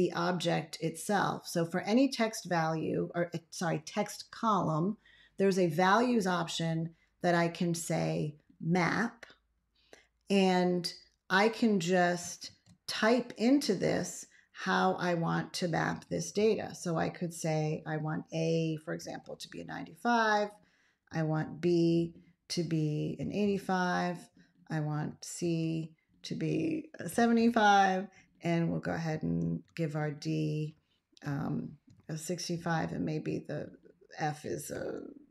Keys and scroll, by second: 12.3 ctrl+x, 16.2 shift+a, 18.6-19.6 typing, 21.3 shift+b, 23.1 8, 23.4 5, 25.3 shift+c, 27.0 7, 27.2 5, 29.3 shift+d, 31.1 6, 31.7 5, 34.6 shift+f.